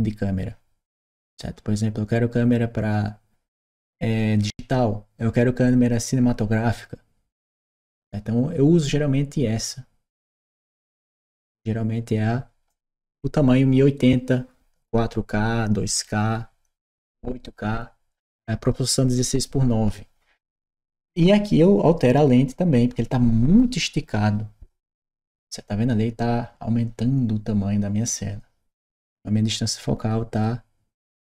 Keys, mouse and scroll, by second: 1.1 click, 10.3 click, 25.0 click.